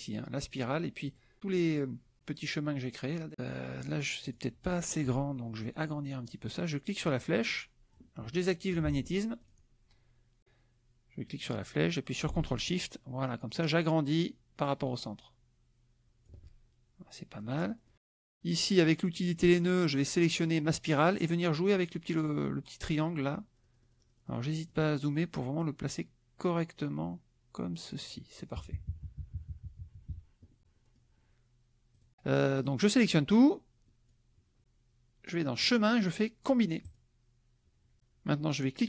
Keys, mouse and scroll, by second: 1.1 click, 3.3 click, 4.3 click, 6.7-8.1 drag, 8.8 ctrl+z, 9.4 ctrl+click, 11.2-16.4 drag, 17.3 click, 19.1 click, 20.3 click, 22.2-23.3 drag, 23.5-25.5 middle drag, 25.5-28.0 drag, 28.5 KP_Subtract, 30.8-31.9 middle drag, 31.9 click, 32.5 click, 33.1-34.3 drag, 35.6 click, 36.8 click.